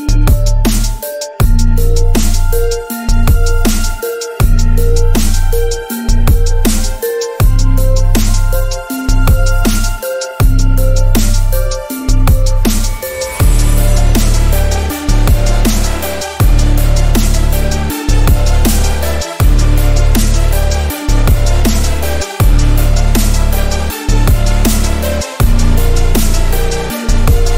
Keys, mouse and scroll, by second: 0.2-2.0 drag, 3.6 click, 6.1 alt+scroll up 1, 6.3-6.7 scroll down 2, 7.5-10.4 drag, 21.2 click, 23.5 click, 24.6 click, 25.8-26.5 drag.